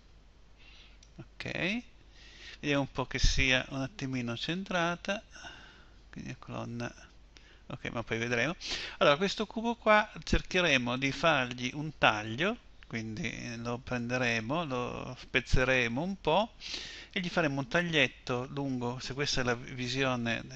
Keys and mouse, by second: 3.8 z, 13.7 z.